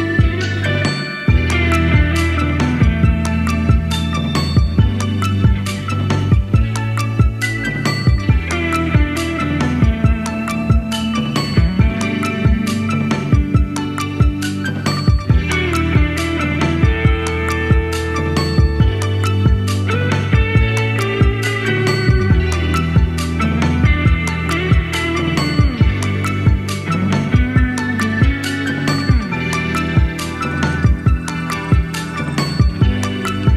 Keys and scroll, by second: 11.5 super+d, 26.0 Left, 26.2-29.9 Left, 32.1 super+z, 33.0 super+z.